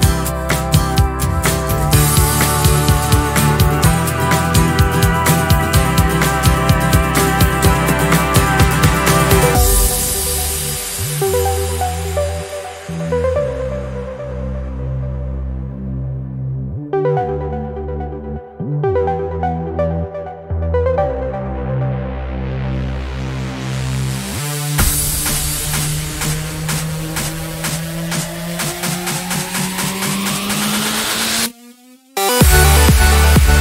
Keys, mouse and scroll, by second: 1.1 ctrl+click, 2.7 click, 5.7 click, 6.6 click, 7.8 click, 9.1 ctrl+a, 11.0 click, 12.5 click, 15.8 click, 18.2 click, 21.7-22.3 ctrl+scroll down 2, 23.0 ctrl+click, 26.3 ctrl+scroll up 2, 26.9 ctrl+scroll up 2, 28.1 ctrl+click, 31.4 click, 32.4 click.